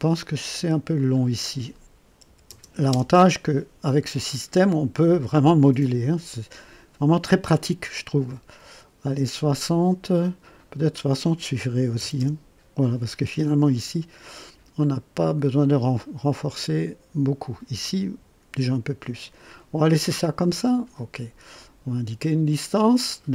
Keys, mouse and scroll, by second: 0.9 click, 2.2 KP_7, 2.5 KP_0, 2.9 KP_Enter, 10.7 click, 11.8 KP_6, 12.0 KP_0, 12.1 KP_Enter, 14.8-17.7 drag, 21.5 click.